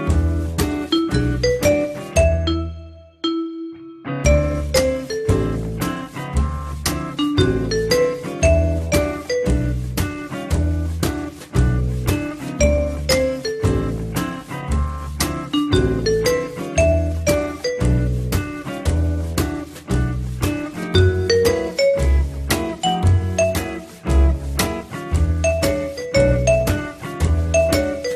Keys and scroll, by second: 19.3-20.2 typing.